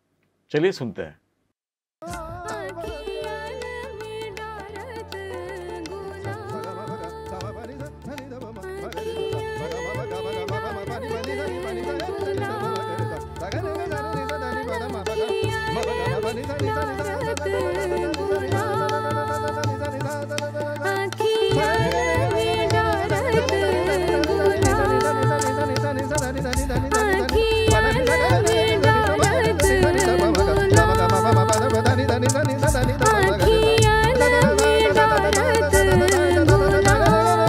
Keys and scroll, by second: 1.9 space.